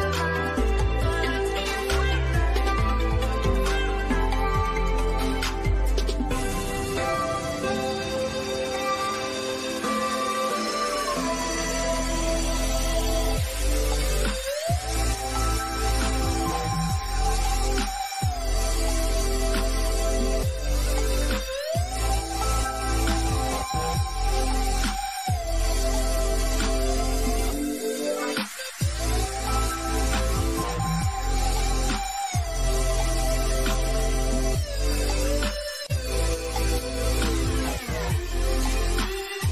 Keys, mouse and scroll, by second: 3.6 click, 7.6 click, 10.1 click, 12.9 click, 13.4-14.1 scroll down 1, 14.3 click, 14.9-15.4 scroll up 1, 18.3 click, 20.6 Right, 26.7 click, 28.6 middle click, 29.2 scroll down 1, 31.2 click, 33.0 Left, 36.0 click.